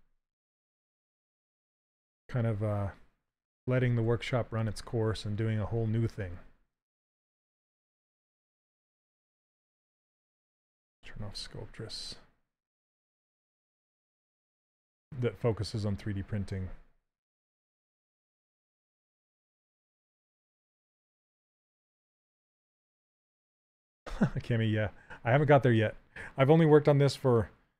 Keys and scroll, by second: 0.7 s, 3.7 s, 9.2 s, 19.0 shift+f.